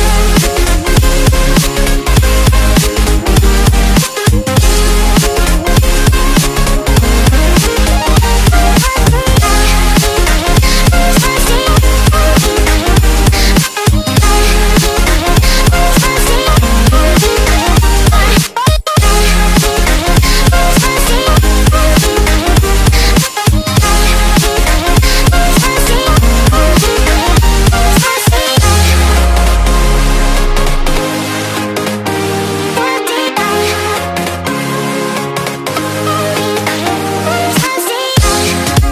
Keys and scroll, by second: 0.5 BackSpace, 1.0 KP_1, 2.5 BackSpace, 3.3 KP_0, 5.6 1, 10.4 1, 13.4 KP_1, 13.5 KP_3, 26.4 ctrl+d, 28.2 ctrl+z.